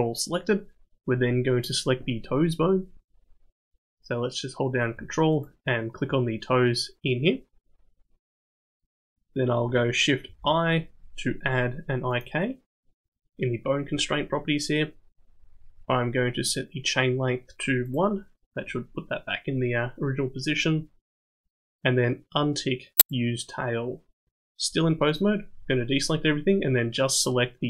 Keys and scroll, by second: 10.3 shift+i.